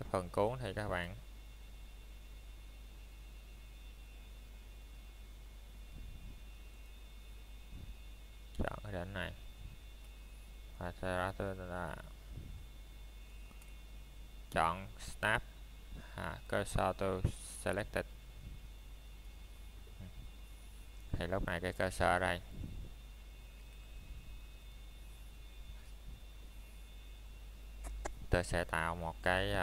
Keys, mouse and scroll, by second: 1.0 middle click, 2.0 shift+middle click, 5.0 click, 7.3 click, 10.2 click, 10.9 middle click, 11.2 scroll down 1, 11.7 shift+middle click, 12.4-13.4 scroll up 1, 13.5 shift+middle click, 14.8-15.3 scroll down 1, 15.3 middle click, 15.7-16.3 scroll up 1, 16.3 middle click, 17.0 shift+middle click, 17.4 scroll down 1, 22.6 Tab, 23.6 click, 24.4 middle click, 24.9-25.5 scroll up 1, 25.5 click, 26.0-26.4 scroll down 1, 26.4 middle click, 27.1 shift+scroll down 1, 27.5 scroll up 1.